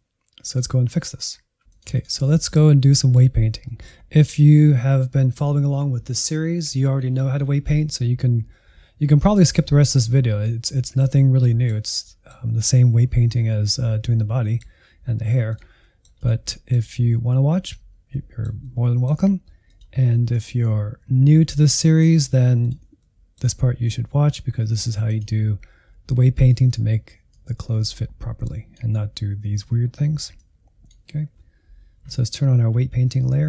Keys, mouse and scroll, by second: 0.0 n, 0.4 middle click, 0.5 Insert, 0.7 middle click, 1.5 click, 2.1-3.4 middle drag, 3.4 scroll down 1, 3.6-15.4 middle drag, 15.4 click, 15.7 middle click, 16.5-19.6 middle drag, 19.6-21.3 drag, 21.3-22.5 middle drag, 22.5 click, 23.0-25.1 middle drag, 25.1-33.3 drag, 33.3 middle click.